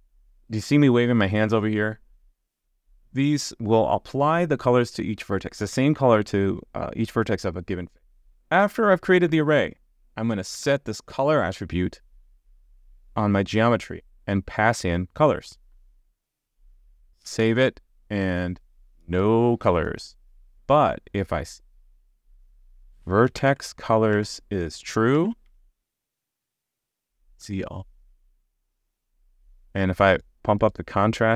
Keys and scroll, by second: 8.2 super+z, 10.5 super+z, 12.8 super+z, 17.4 super+s, 25.5 super+s.